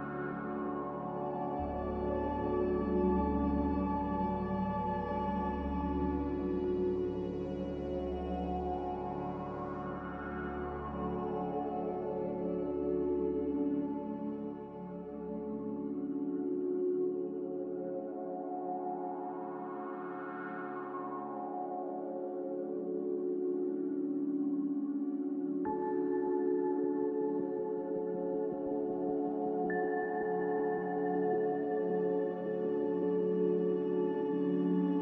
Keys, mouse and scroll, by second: 3.4 a, 8.4 m, 16.5 Escape, 16.6 Escape, 23.8 ctrl+z, 25.0 b, 28.4 a, 30.4 m, 32.1 Escape, 32.3 Escape.